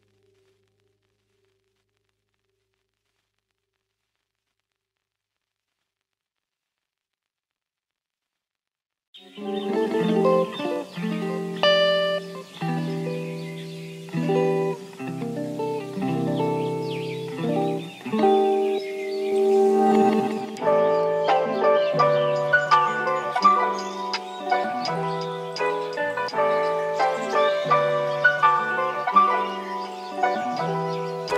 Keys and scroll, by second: 1.7-3.8 typing, 7.1 w, 18.8-19.7 typing, 23.2-24.0 typing, 25.2-26.0 typing, 27.6 typing.